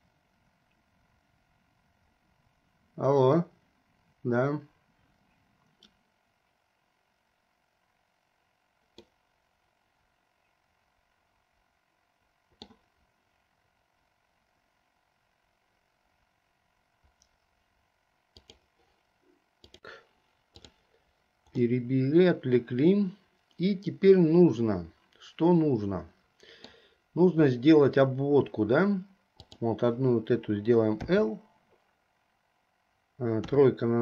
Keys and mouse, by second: 9.1-12.8 middle drag, 21.9-25.4 middle drag, 25.4-27.0 drag, 25.4-27.0 right drag, 31.3 l, 33.6 KP_3.